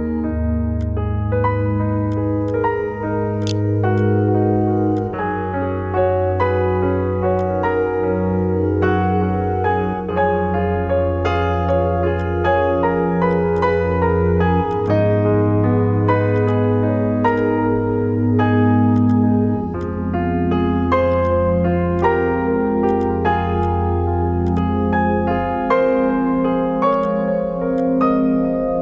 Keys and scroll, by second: 3.1 3, 8.9-10.1 typing, 25.1 Escape, 28.0-28.8 typing.